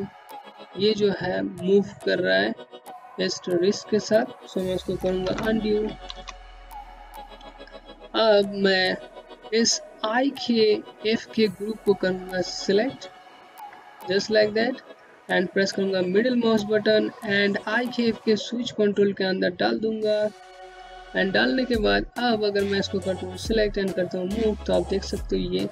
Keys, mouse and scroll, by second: 3.2 z, 4.0 z, 5.2 click, 10.2 click, 14.1 middle click, 19.4 click.